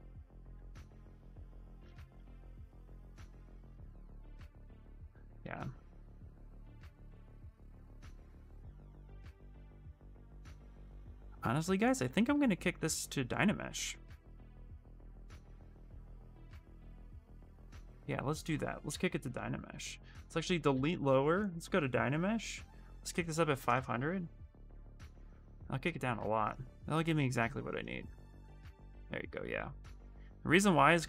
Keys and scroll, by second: 0.3 s, 14.9 s, 20.7 shift+f, 27.7 shift+f, 28.5 ctrl+z, 29.3 ctrl+w, 30.6 d.